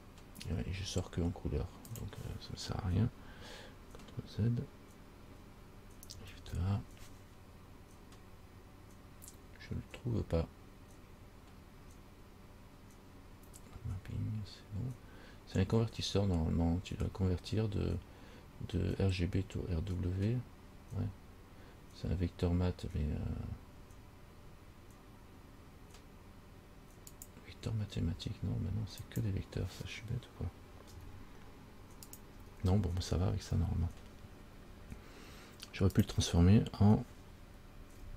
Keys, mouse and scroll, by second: 6.5 shift+a, 31.2 Delete, 32.3 click, 32.7 Delete, 36.2 click.